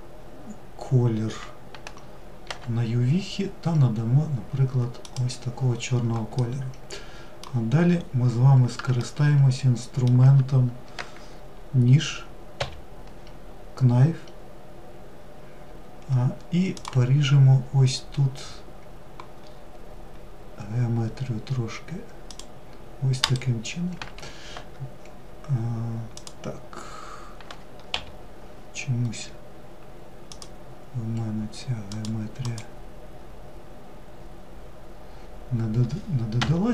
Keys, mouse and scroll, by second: 5.5-7.1 middle drag, 7.1-8.1 scroll up 2, 8.1-11.3 shift+middle drag, 18.6 scroll up 3, 25.3 click.